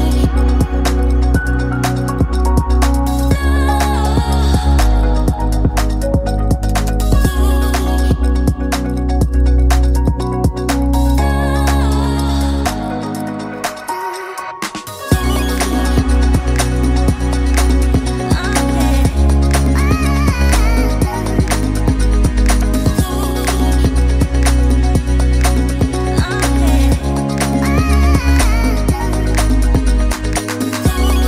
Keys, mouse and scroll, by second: 2.6 shift+a, 25.3 click.